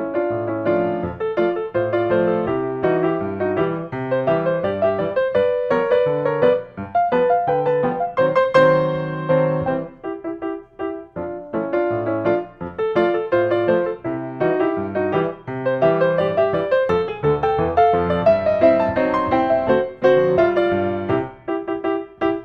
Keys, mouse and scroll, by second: 0.8-1.9 middle drag, 2.1-3.2 drag, 4.4 click, 5.2 typing, 5.9 Return, 9.9 click, 11.3 click, 13.4 click, 14.9-15.2 scroll, 16.2 click, 19.0 click, 20.3-21.4 drag.